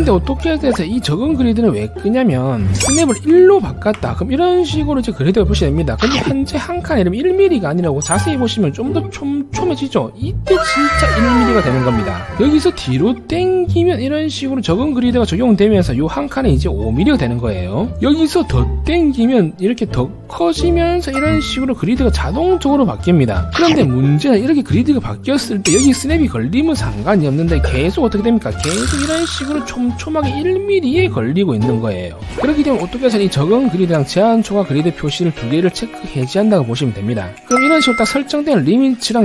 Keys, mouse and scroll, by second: 0.1 e, 0.2 right click, 3.8 1, 8.7 scroll up 1, 9.3 scroll up 1, 9.8 scroll down 1, 10.2 scroll up 1, 10.7 1, 11.0 right click, 11.1 click, 11.8 click, 13.0-13.5 scroll down 2, 14.6 scroll down 1, 18.5 scroll up 1, 19.1 scroll up 1, 19.8-20.3 scroll up 2, 20.8 middle click, 26.6 1, 26.8 right click, 28.5 scroll down 1, 28.9 middle click, 29.7 middle click, 30.0 middle click, 36.5 click.